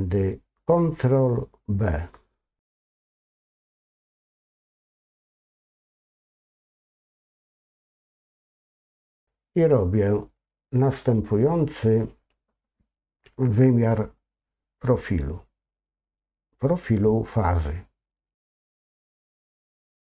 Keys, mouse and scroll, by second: 18.2-20.1 drag.